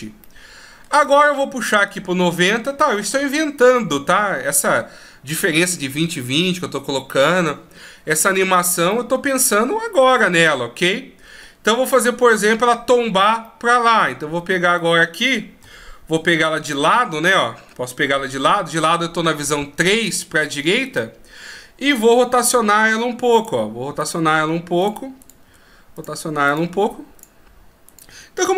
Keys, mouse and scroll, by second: 0.5 middle click, 2.2 click, 9.2 middle click, 13.8 middle click, 15.1 middle click, 15.9 KP_3, 17.0 middle click, 18.6 KP_3, 21.1 right click, 22.8 r, 24.3 right click, 24.5 r, 25.5 right click, 25.8 r, 26.8 right click, 27.0 r, 28.2 right click, 28.4 r.